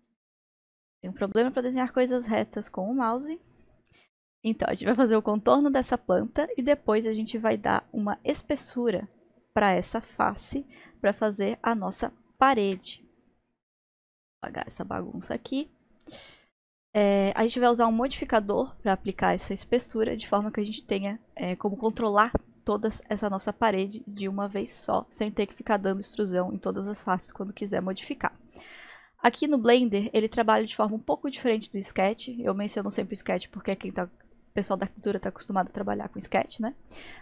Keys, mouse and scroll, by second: 7.8-12.7 drag, 13.5-17.9 drag, 19.7 click, 20.4-25.1 middle drag, 28.0-31.2 middle drag, 31.3-32.4 scroll down 1, 32.4-33.2 scroll down 1, 33.2 scroll down 1.